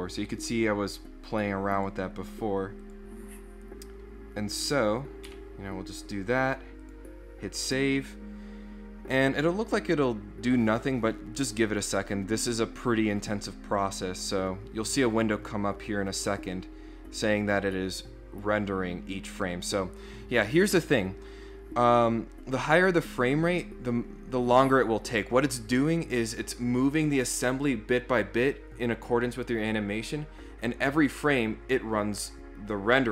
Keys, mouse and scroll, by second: 1.8 click, 2.1 click, 2.8 click, 5.3 4, 6.8 click.